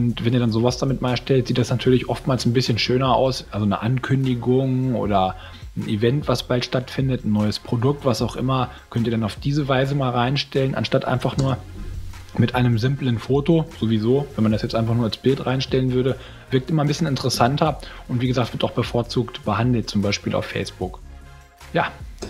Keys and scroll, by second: 11.3 space, 13.5 space, 17.3 space.